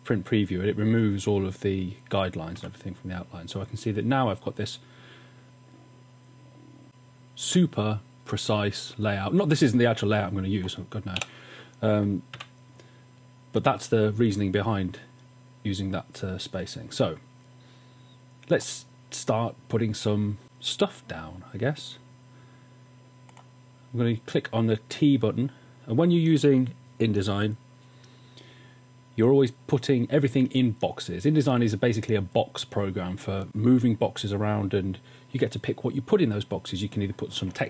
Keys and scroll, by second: 2.6 w, 11.4 BackSpace, 12.3 w.